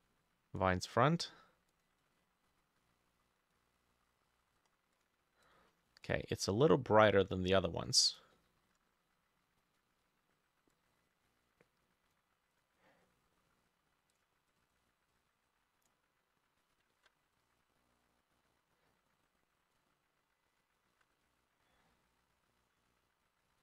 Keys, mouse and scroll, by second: 2.2-2.8 scroll down 6, 2.8 middle click, 3.6 middle click, 8.4 middle click, 13.1 middle click, 14.6 double click, 17.0 ctrl+d, 21.0 ctrl+d.